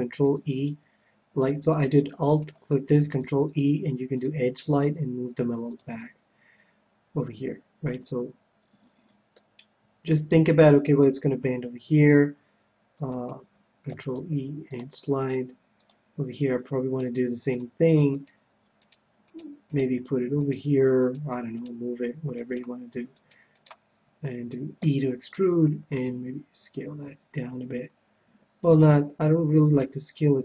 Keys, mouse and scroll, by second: 0.2 ctrl+e, 2.3-4.1 right drag, 3.1 ctrl+e, 4.2 ctrl+e, 5.7-7.5 drag, 9.3-11.0 middle drag, 13.1-14.8 right drag, 14.1 ctrl+e, 15.0 middle click, 15.9-17.4 drag, 16.9-18.7 middle drag, 18.0-27.2 right drag, 24.8 e, 25.3 e, 26.6 s, 28.6-30.4 right drag.